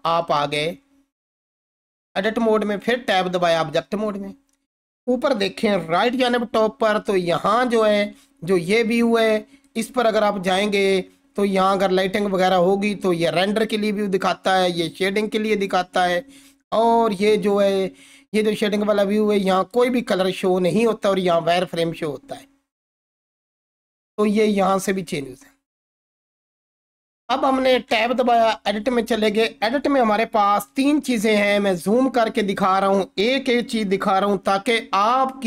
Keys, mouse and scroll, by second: 0.5-2.6 scroll up 1, 2.6 Tab, 6.0 ctrl+4, 14.7 click, 23.6 ctrl+4, 26.3 click, 27.9 Tab, 30.7 ctrl+4.